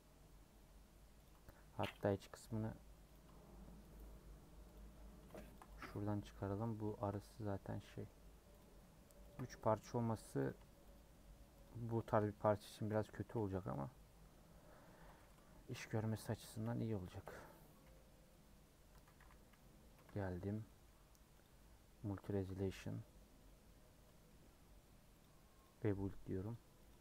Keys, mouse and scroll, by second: 1.2 click, 3.1 ctrl+click, 4.7 click, 6.0 middle click, 6.7 scroll up 1, 6.9 shift+middle click, 7.3-7.6 scroll up 1, 7.6 scroll down 1, 7.9 middle click, 8.6 click, 9.3 ctrl+click, 10.4 click, 11.6 shift+click, 11.9 shift+click, 12.7 a, 13.7 u, 14.8 scroll down 1, 15.6 /, 16.1 Tab, 16.6 h, 17.0 click, 17.8 /, 18.9 Tab, 19.1 a, 19.9 KP_Decimal, 20.6-22.3 middle drag, 22.3-24.0 drag, 24.0 Tab, 24.2-25.6 middle drag, 25.6-27.0 drag.